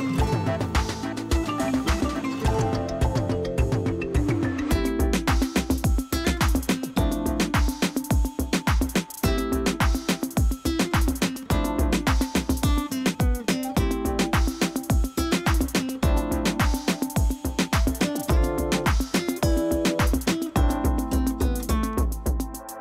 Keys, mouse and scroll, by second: 0.0-0.4 typing, 1.9 space, 2.4 ctrl+click, 3.3 space, 3.4-4.0 click, 3.8 space, 4.7 click, 8.2 space, 8.4 ctrl+click, 10.3-10.7 scroll down 1.